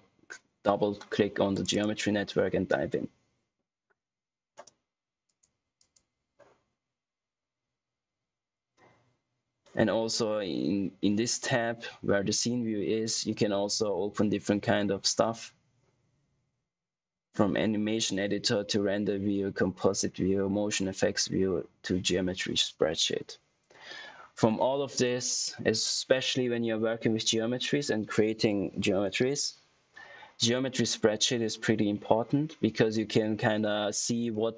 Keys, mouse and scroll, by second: 1.8 click, 5.7 click.